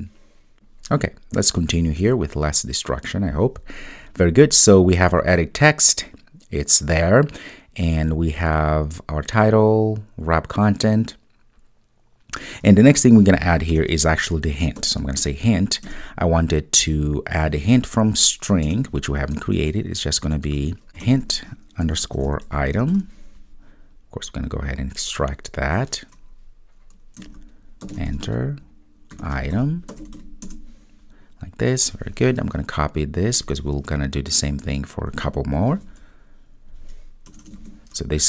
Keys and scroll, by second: 35.8 super+c.